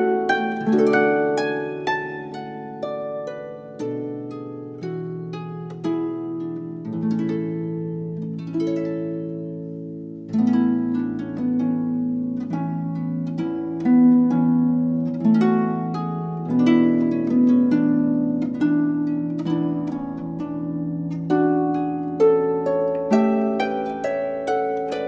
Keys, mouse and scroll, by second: 0.0 click, 1.9 middle click, 5.7 click, 7.4 middle click, 16.0 BackSpace, 22.1 alt+a, 23.2 alt+f, 23.8 Escape.